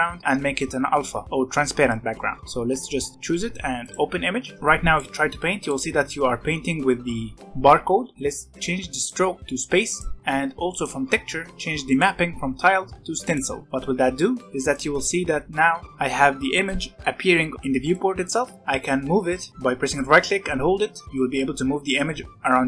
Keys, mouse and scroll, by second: 4.5 ctrl+z, 4.6-7.9 drag, 7.9 ctrl+z, 8.1-8.6 scroll down 4, 8.9-10.2 drag, 10.7-13.6 drag, 14.7-22.6 right drag.